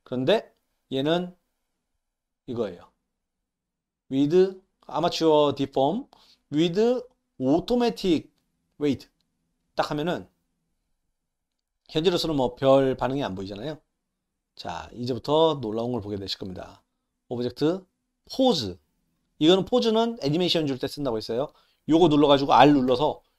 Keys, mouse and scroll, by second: 15.3 click, 17.2-18.3 drag, 21.6 click.